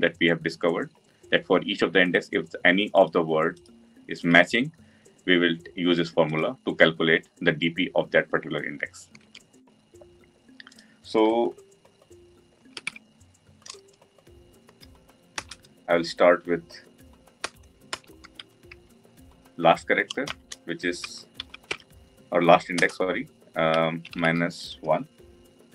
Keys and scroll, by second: 15.6 Return, 22.7 Return.